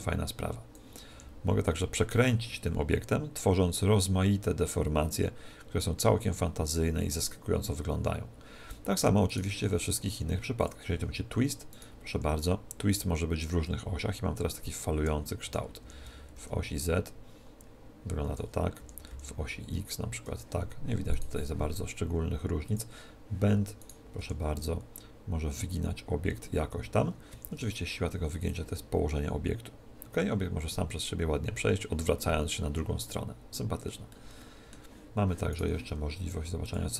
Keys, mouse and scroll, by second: 1.1 r, 9.3 right click, 10.6 click, 11.7 middle click, 12.1 r, 12.3 click, 12.3 right click, 15.8 r, 18.8 r, 21.1 right click, 22.7 click, 23.8 right click, 24.2 r, 28.5 click, 34.1-35.9 middle drag, 35.5 right click, 36.6 click.